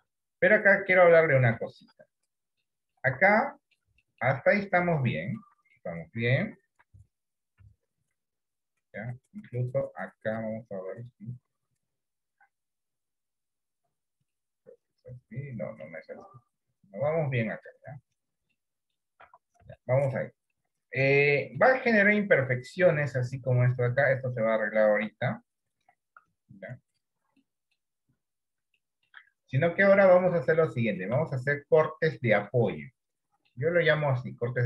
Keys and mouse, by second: 0.3 middle click, 1.7 shift+middle click, 2.7 middle click, 3.2 Tab, 3.5 middle click, 4.2 shift+middle click, 4.6 middle click, 5.9 shift+middle click, 7.1 Tab, 7.7 Tab, 11.3-12.3 drag, 14.4-16.0 middle drag, 17.3 click, 18.6 middle click, 19.4 Tab, 19.9 middle click, 20.6 middle click, 21.4 middle click, 22.7 click, 23.5 click, 25.1 d, 25.9 d, 27.0 click, 27.5 middle click, 28.9 shift+middle click, 29.4 middle click, 30.5 shift+middle click, 31.4-32.6 middle drag, 33.0 shift+middle click.